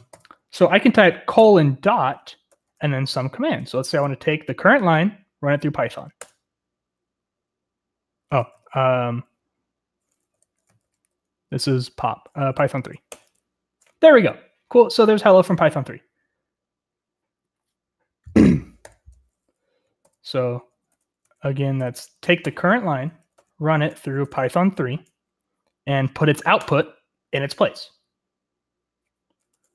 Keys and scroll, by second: 1.3-4.4 typing, 6.2 Return, 8.2 Return, 10.3-11.5 typing, 12.5-13.1 typing, 18.8-25.2 typing, 21.2 Escape, 26.6 typing.